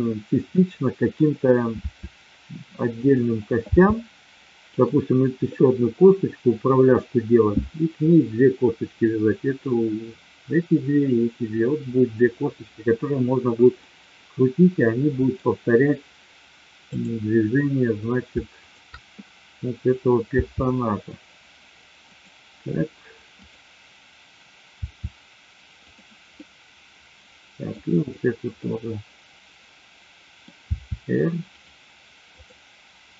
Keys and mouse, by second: 0.5-1.1 middle drag, 1.7 r, 3.0 click, 3.7 g, 4.7 click, 13.9-15.4 middle drag, 16.9-17.7 drag, 18.6-19.5 shift+drag, 20.3 r, 22.1 click, 24.6 r, 26.4-27.7 middle drag, 27.9-28.9 drag, 28.9-30.4 middle drag, 30.5 r, 31.5 click, 32.3-33.1 drag.